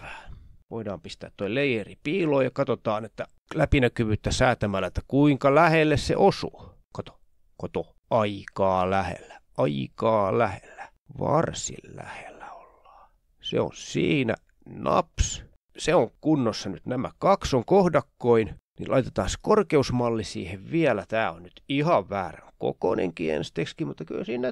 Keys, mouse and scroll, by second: 0.1 ctrl+scroll down 2, 0.4 click, 0.8-1.1 scroll down 2, 1.4-4.6 drag, 5.1-6.3 drag, 6.9 click, 7.5 click, 8.1-8.7 ctrl+scroll up 2, 8.7-11.0 drag, 11.6-12.6 shift+scroll down 5, 13.2-14.2 drag, 14.5-14.9 ctrl+scroll down 2, 15.0-15.4 ctrl+scroll up 2, 15.4-16.3 shift+scroll down 4, 17.1 click, 18.2 click, 19.2 click, 20.7 click, 21.3 click, 23.9-24.5 ctrl+scroll up 2.